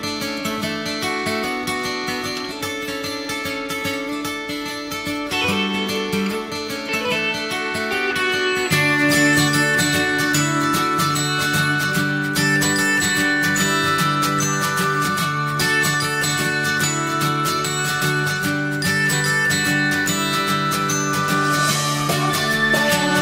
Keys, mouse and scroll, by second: 0.5 click, 0.8 g, 3.1 click, 3.4-3.9 scroll down 1, 3.9 click, 4.3 g, 5.1 scroll down 1, 5.4 middle click, 5.8 alt+z, 5.9 click, 6.1 middle click, 6.5 scroll down 1, 6.6 middle click, 7.5 click, 7.9 middle click, 8.6 click, 9.2 alt+z, 9.6 click, 10.1 click, 11.1 alt+z, 11.4 click, 11.6 middle click, 12.0 click, 12.2 Tab, 12.6-13.0 scroll down 1, 13.0 click, 13.3 scroll down 1, 13.4 middle click, 13.9 shift+d, 14.8 alt+middle click, 15.7 click, 16.7 alt+middle click, 17.6-18.2 scroll up 2, 18.2 click, 19.4 alt+z, 19.8 shift+middle click, 20.2 scroll up 1, 20.4 Tab, 20.8 Tab, 21.0 click, 21.2 Tab, 21.4-21.9 scroll up 1, 21.9 click, 23.0 ctrl+shift+b.